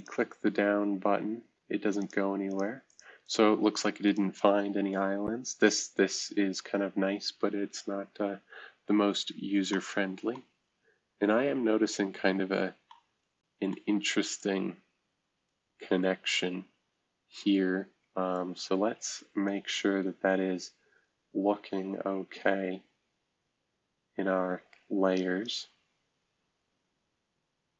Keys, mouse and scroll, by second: 0.0 click, 2.0-6.4 drag, 7.6-8.3 scroll down 2, 8.3-10.4 scroll up 1, 10.4-10.8 scroll up 1, 10.8-12.9 scroll down 1, 12.9-15.4 scroll down 1, 14.4-15.4 drag, 15.5 right click, 17.5 right click, 17.5-18.3 scroll up 1, 19.4-25.5 drag.